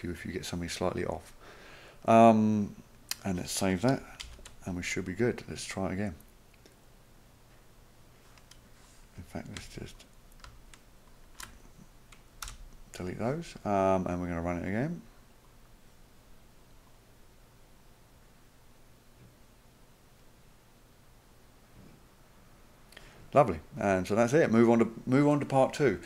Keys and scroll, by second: 4.2 ctrl+s, 12.4 Delete.